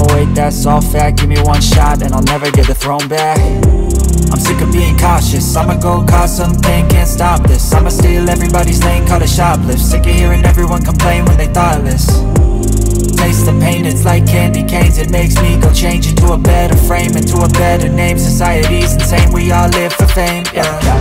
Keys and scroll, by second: 4.4 space, 7.4 space, 10.4 space, 13.6 alt+Tab, 20.1 Tab.